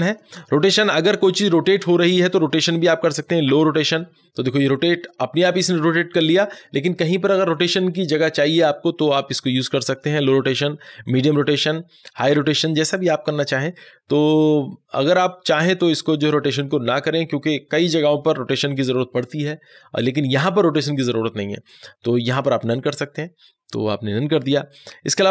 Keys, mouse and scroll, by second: 9.8 click, 9.8 click, 21.5 click, 21.6 click.